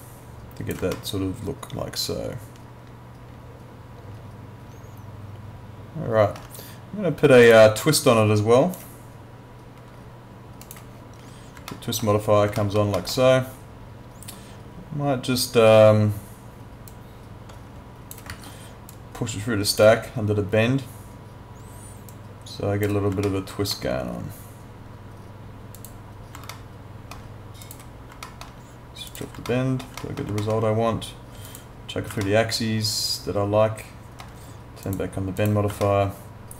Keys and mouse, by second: 0.9 alt+middle click, 7.5 click, 10.6 click, 11.7 alt+middle click, 12.6 alt+middle click, 16.9 click, 18.3 ctrl+z, 18.9 click, 22.1 click, 23.3 alt+middle click, 25.8 click, 26.5 alt+middle click, 27.6 click, 28.3 alt+middle click, 29.1 click, 29.5 alt+middle click, 30.4 alt+middle click, 31.5 click, 32.3 alt+middle click, 34.9 click, 35.9 alt+middle click.